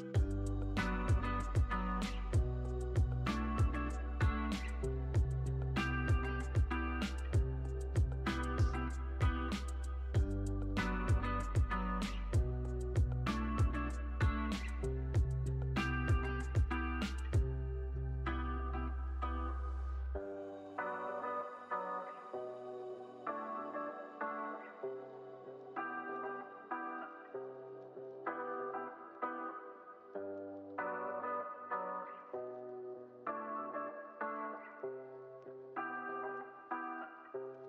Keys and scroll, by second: 2.6 k, 4.7 z, 5.5 x, 6.3 z, 6.9 x, 8.0 z, 9.4 x, 12.0 z, 12.6 x, 13.9 x, 17.4 super+z, 18.8 x, 22.1 z, 22.8 x, 26.9 z, 27.8 x, 30.4 z, 31.6 x, 33.9 x, 35.5 x.